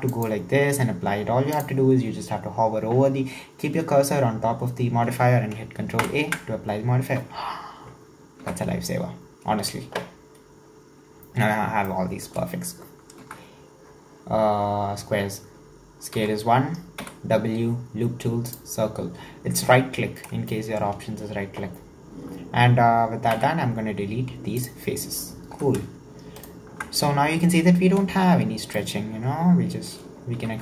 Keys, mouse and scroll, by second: 0.1-1.7 drag, 6.0 ctrl+a, 8.5 Tab, 10.8-11.1 scroll down 1, 11.1-11.9 scroll up 2, 11.9-13.2 shift+middle drag, 13.2 Tab, 16.2 Tab, 17.0 w, 18.9-19.4 scroll down 3, 19.4 scroll up 1, 20.5-22.1 shift+middle drag, 22.1-23.3 scroll down 1, 23.3 x, 25.6 2, 26.4-27.4 alt+right drag, 27.4-28.7 scroll up 1, 28.7 scroll down 1, 28.8-30.4 middle drag, 30.4 e.